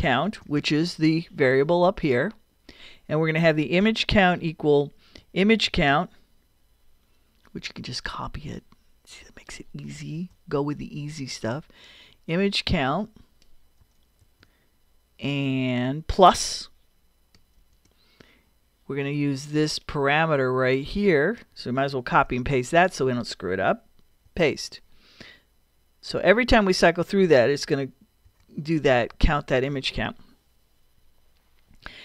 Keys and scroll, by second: 0.0-0.8 typing, 3.8 =, 5.4-6.9 typing, 10.1 super+c, 14.2 super+v, 17.6 shift+=, 22.1 super+c, 24.3 super+v, 28.3 ;, 29.1 Return.